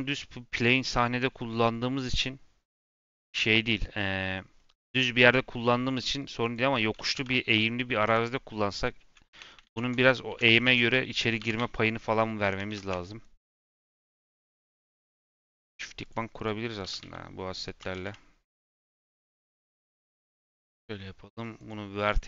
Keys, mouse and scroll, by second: 6.4 click, 7.1 g, 9.2 Tab, 10.2 i, 10.8 click, 11.3 g, 12.8 Tab, 15.9 click, 16.3 click, 16.7 g, 19.9-22.2 drag.